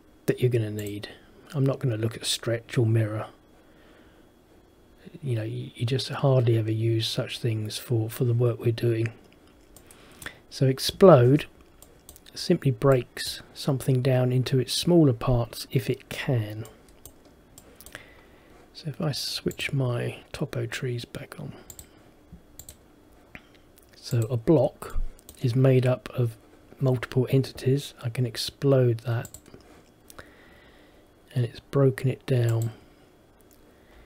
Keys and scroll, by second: 11.4 Escape.